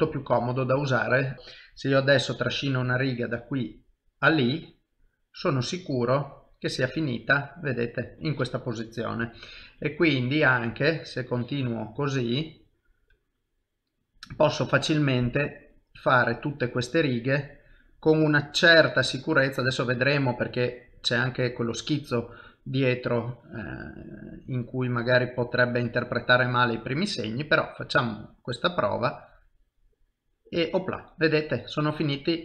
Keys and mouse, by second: 0.3 ctrl+z, 0.7 middle click, 1.2 shift+middle click, 1.3 KP_1, 1.3 KP_7, 1.5 click, 6.1 middle click, 9.2 KP_1, 10.1 KP_7, 11.2 click, 14.3 click, 29.9 middle click.